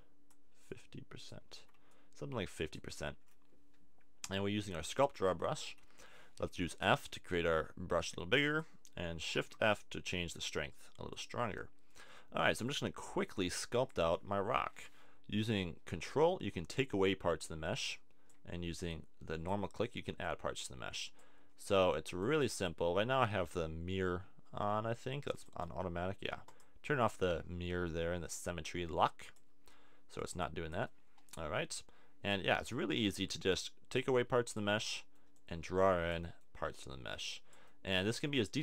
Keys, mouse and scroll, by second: 1.6 super+z, 3.7-5.0 middle drag, 5.7 f, 8.6 click, 9.3 shift+f, 11.2 click, 18.0 middle click.